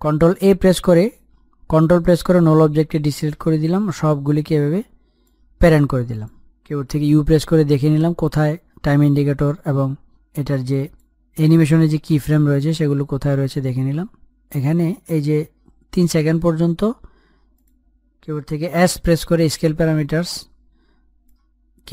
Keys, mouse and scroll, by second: 0.5 click, 2.2 a, 3.8-7.8 ctrl+drag, 8.9 u, 11.5-14.7 drag, 15.6-17.0 drag, 17.0 Page_Down, 17.8 Page_Up, 19.3 click, 20.5 s.